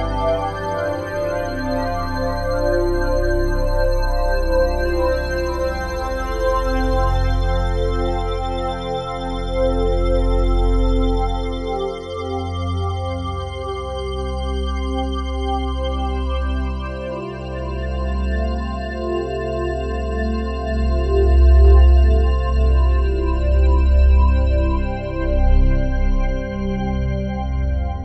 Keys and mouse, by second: 0.1 click, 0.5 typing, 1.4-2.5 drag, 3.1 typing, 3.9 click, 4.2 typing, 4.9 click, 5.7 click, 7.5 Escape, 9.7-13.9 drag, 13.7-15.3 typing, 15.0-16.4 drag, 16.6 typing, 17.5 click, 17.9 typing, 19.1 click, 20.2-22.5 drag, 22.5 3, 22.9-26.3 drag, 26.4-27.5 drag.